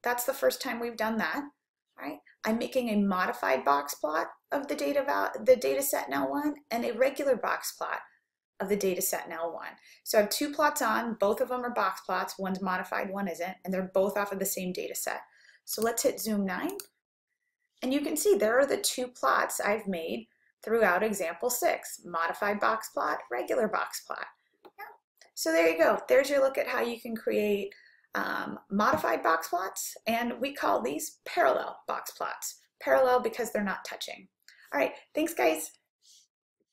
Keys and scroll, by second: 16.8 9.